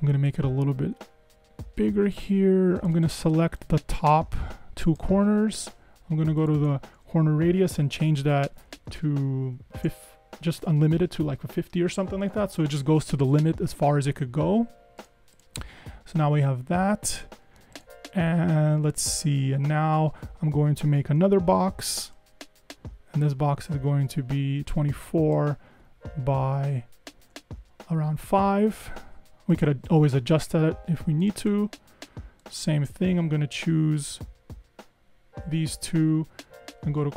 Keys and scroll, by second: 8.0 shift+Up, 8.3 shift+Up, 8.6 shift+Up, 8.6 shift+Up, 8.8 shift+Up, 9.6 shift+Up, 10.4 Up, 10.5 Up, 10.8 Up, 11.4 Down, 16.3 Escape, 16.8 Escape, 21.3 r, 26.6 super+Down, 27.1 super+Down, 27.6 Up.